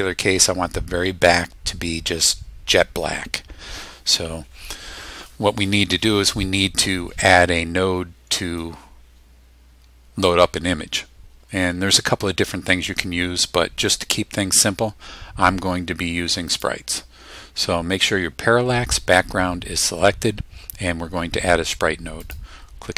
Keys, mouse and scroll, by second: 16.5 click, 22.2 click.